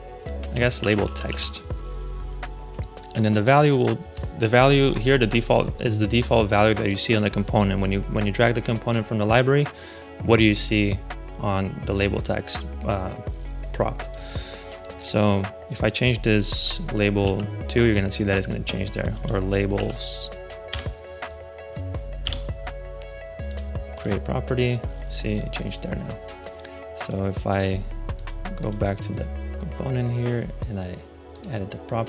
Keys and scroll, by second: 0.0-1.7 typing, 16.4 Right, 17.2 2, 19.0 BackSpace, 19.7 s, 20.6 Return, 22.1 BackSpace.